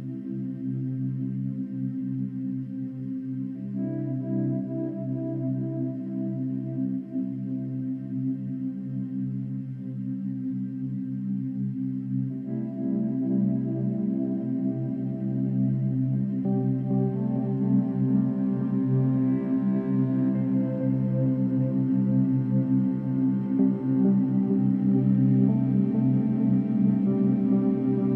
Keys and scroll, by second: 3.6 ctrl+d, 12.9 ctrl+d, 18.7 ctrl+d, 23.6 ctrl+-, 24.2 ctrl+-, 24.3 ctrl+=, 24.5 ctrl+-, 24.8 space, 25.1 ctrl+=, 25.5 space, 26.0 space.